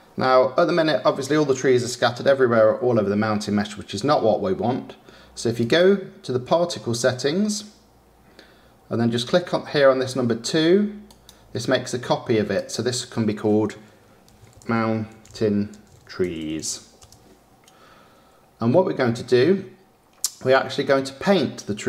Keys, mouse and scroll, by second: 11.8-17.2 drag, 17.2 e.